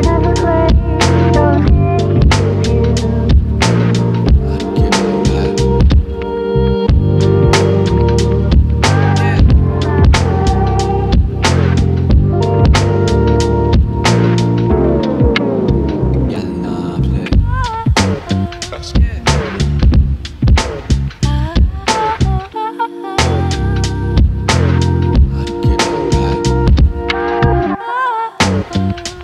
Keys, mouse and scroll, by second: 1.8 e, 4.5-6.6 drag, 6.6 g, 7.5 ctrl+click, 8.2 g, 9.9 click, 10.3 click, 10.6 g, 11.8 click, 12.2 click, 12.5 g, 13.9 click, 14.3 g, 15.1 g, 16.2 click, 16.5 g, 17.9 g, 18.9 click, 19.1 g, 21.7 click, 21.7 click, 22.3-23.6 shift+middle drag, 23.6 e, 25.6 e, 28.4 e.